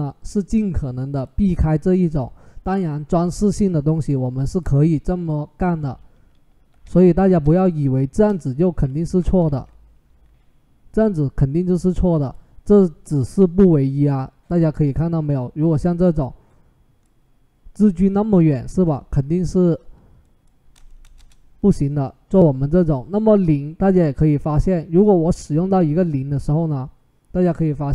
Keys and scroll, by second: 8.7 Escape, 9.2 ctrl+z, 20.8 typing, 20.9 Return.